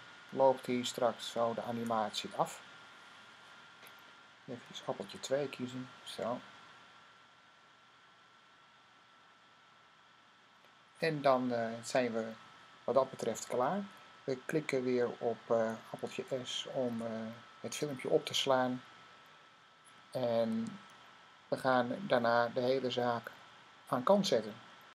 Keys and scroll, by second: 4.9 2, 16.8 s.